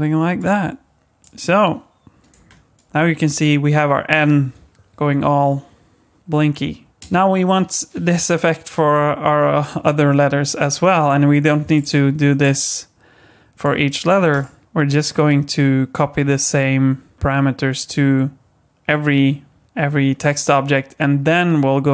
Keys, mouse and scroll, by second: 1.2 click, 2.3 space, 6.9 click, 6.9 space, 7.0 space, 7.5 click, 11.7 click, 12.4 click, 14.3 click, 16.6 click.